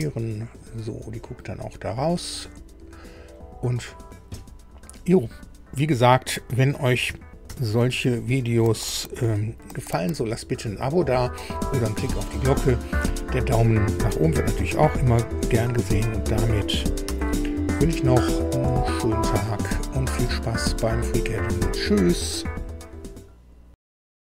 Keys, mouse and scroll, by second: 0.6-3.5 drag, 7.5 super+u, 17.1 super+i.